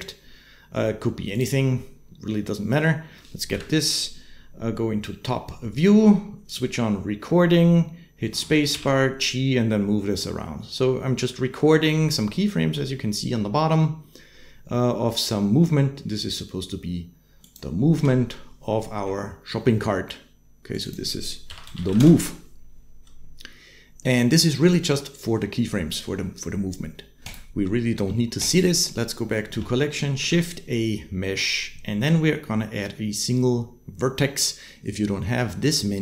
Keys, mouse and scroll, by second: 3.3 KP_7, 8.1 space, 8.5 g, 17.7 space, 20.5 middle click, 20.7 click, 20.7-21.8 middle drag, 27.0 click, 30.0 shift+a.